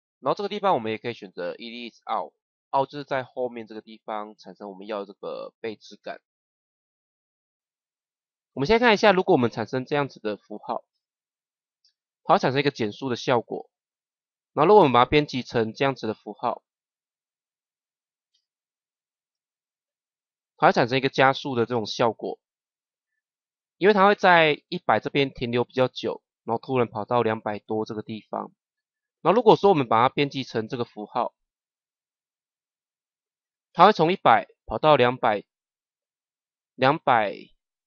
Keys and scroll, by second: 10.8 KP_0, 18.2 KP_0.